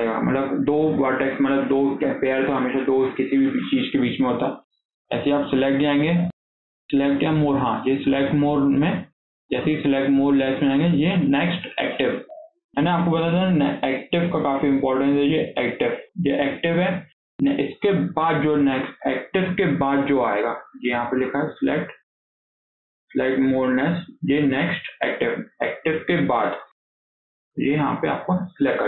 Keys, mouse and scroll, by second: 5.3-8.5 drag, 13.4 scroll up 2, 13.7-17.3 shift+middle drag, 21.0-24.1 drag.